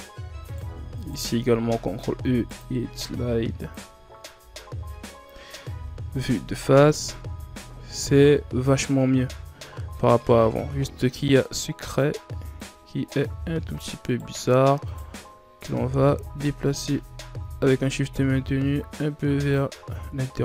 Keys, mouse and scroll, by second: 0.2 right click, 0.8 shift+right click, 1.6 ctrl+e, 4.2 KP_1, 4.8 Tab, 5.4 scroll down 3, 6.4-7.0 scroll down 3, 7.7-9.0 shift+scroll down 3, 9.0 scroll up 4, 10.4 Tab, 11.8-13.5 drag, 13.5 shift+right click, 13.9 shift+right click, 14.6 shift+right click, 15.4-18.5 drag, 19.7 Tab.